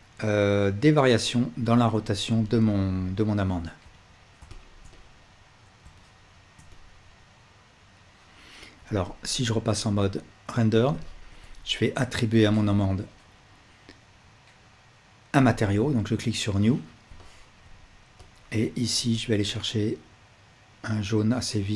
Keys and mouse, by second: 2.4-3.7 alt+drag, 3.9-5.8 alt+drag, 5.8-10.0 alt+shift+middle drag, 11.1-12.4 ctrl+alt+middle drag, 15.5-17.1 middle drag, 17.1-21.7 ctrl+alt+drag, 17.1-18.3 ctrl+alt+right drag.